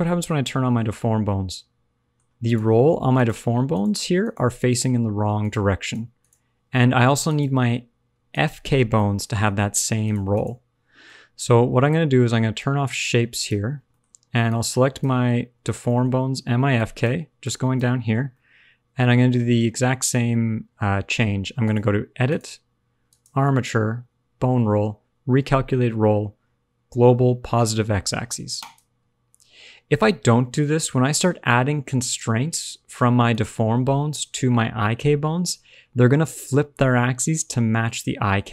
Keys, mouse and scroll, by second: 0.2 shift+click, 0.8 middle click, 2.4 click, 3.1 click, 3.6 click, 4.1 click, 4.6 click, 5.3 shift+click, 5.8 shift+click, 6.1 shift+click, 7.3 click, 8.3 shift+click, 8.8 scroll down 1, 8.9 middle click, 9.5-10.0 scroll up 1, 10.0 click, 10.3 click, 10.8 scroll down 1, 11.0 middle click, 13.3 click, 13.8 shift+middle click, 14.0-14.4 scroll up 2, 14.4 click, 15.6 shift+middle click, 15.8 middle click, 16.7 shift+click, 17.3 click, 18.3 middle click, 21.6 click, 23.0 click, 30.0 middle click, 33.2 shift+click, 34.0 middle click, 37.9-38.5 scroll down 2, 38.1 middle click.